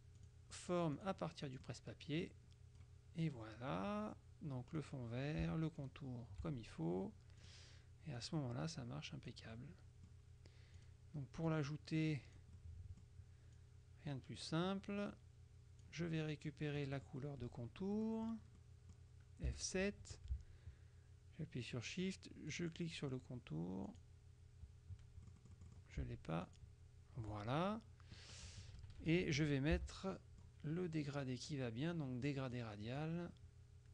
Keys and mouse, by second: 0.3 click, 1.1 click, 2.3-3.4 drag, 4.9 click, 5.9 shift+click, 7.5 click, 8.3-9.9 drag, 10.9 click, 12.7 click, 12.7 middle click, 13.7-16.4 drag, 16.9 click, 16.9 middle click, 18.0 click, 19.5 F7, 22.5 shift+click, 23.9 click, 25.3 click, 26.5 shift+click, 28.6 KP_Subtract, 29.9 g, 30.3 click, 32.3 click.